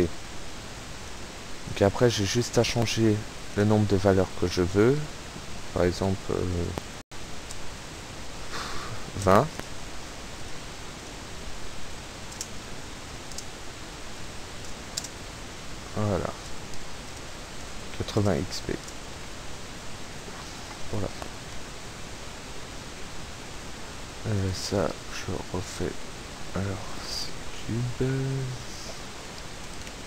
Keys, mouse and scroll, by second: 0.3 Escape, 1.2 click, 1.9 click, 2.7 click, 3.4 click, 7.0 KP_2, 7.2 KP_0, 7.7 click, 10.5 click, 11.0 click, 12.0 p, 12.4 space, 13.4 space, 15.0 space, 17.0 Right, 17.1 space, 17.3 Up, 17.8 Left, 18.0 Up, 18.2 space, 18.8 Left, 18.9 space, 19.5 Escape, 24.0 right click, 28.2 shift+scroll down 2, 28.9 shift+scroll up 2, 29.6 click.